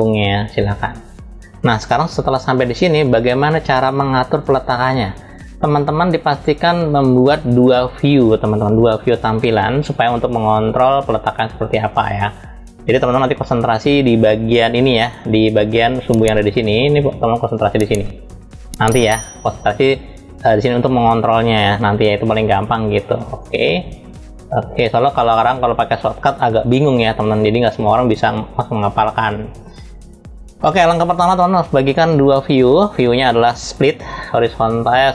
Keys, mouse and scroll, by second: 1.5 click, 13.5 click, 14.8-18.6 drag, 21.9 click, 23.0 click, 23.5-25.9 drag, 26.8 click, 31.2-32.6 drag, 34.3-35.1 drag.